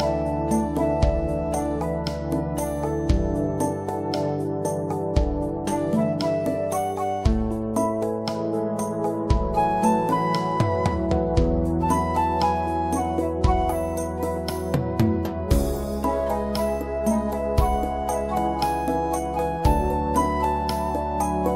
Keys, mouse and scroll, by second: 4.6 click, 5.0 right click, 5.8 click, 10.4 click, 12.2 right click, 12.7 click, 13.7 right click, 14.1 click, 16.4 right click, 16.7 click, 20.0 right click, 20.3 click.